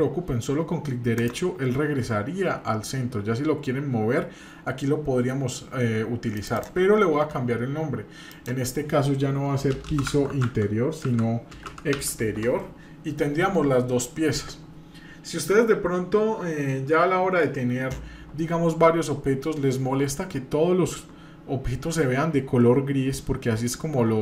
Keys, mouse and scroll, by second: 6.3 click, 6.5-13.3 drag, 9.8 BackSpace.